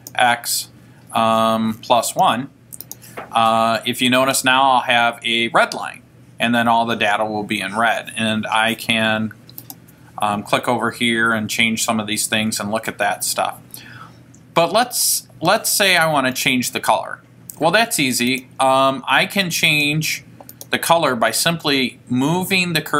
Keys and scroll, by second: 0.1 x, 4.4 1, 10.5 Right, 12.5 Left, 18.5 Down, 19.9 Left, 20.7 Left.